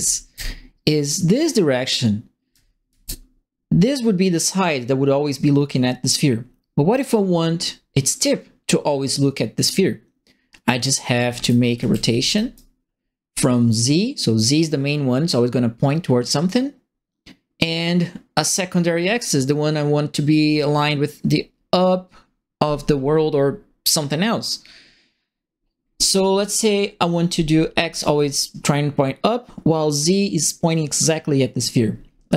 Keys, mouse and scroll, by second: 0.0-0.5 typing, 2.5 d, 2.5 right click, 2.8 q, 11.0-12.7 typing, 11.1-12.5 right drag.